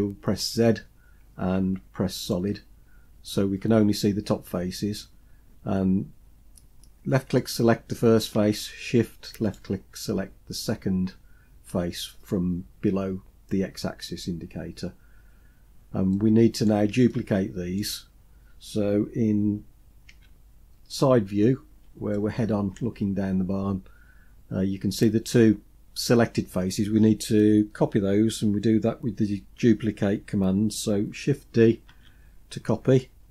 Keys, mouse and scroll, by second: 0.4 z, 7.4 click, 9.4 shift+click, 15.2-16.7 scroll down 5, 16.1 middle click, 17.1-17.9 shift+middle drag, 20.1 KP_3, 21.5 scroll down 1, 22.1-22.8 shift+middle drag, 23.1-23.6 scroll up 2, 31.9 shift+d.